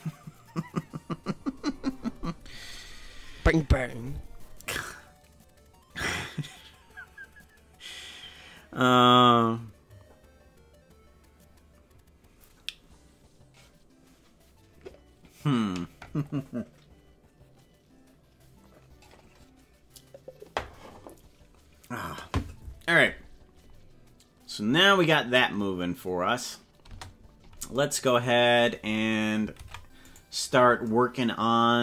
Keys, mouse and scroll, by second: 26.9 space, 29.6 ctrl+Tab, 30.1 right click.